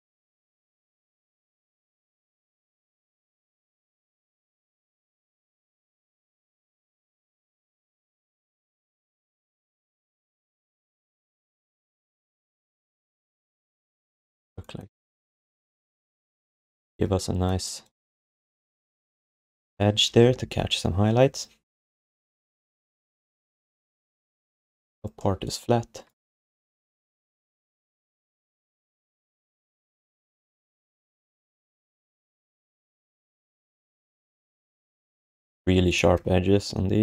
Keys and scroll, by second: 1.0 q, 1.6 alt+q, 5.4 q, 6.0 r, 14.5 alt+shift+d, 14.8 alt+q, 26.3 ctrl+s, 28.9 alt+q, 31.5 r, 35.6 q.